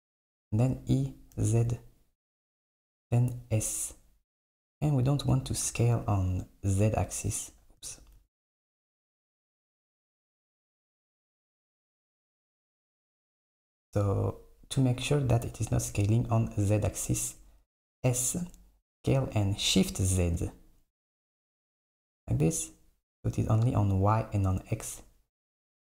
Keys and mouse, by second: 0.7 e, 3.4 s, 5.7 a, 6.8 a, 7.3 click, 8.0-9.9 typing, 11.6 KP_1, 12.6 s, 18.1 s.